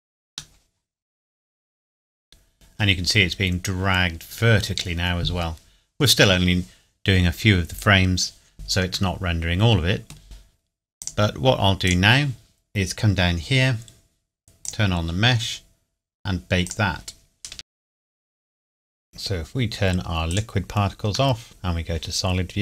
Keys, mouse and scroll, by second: 0.5 middle click, 4.9 scroll down 1, 9.1 middle click, 11.0 click, 12.7 scroll down 1, 14.6 click, 17.8 click, 20.3 click, 21.3 middle click, 21.4 click.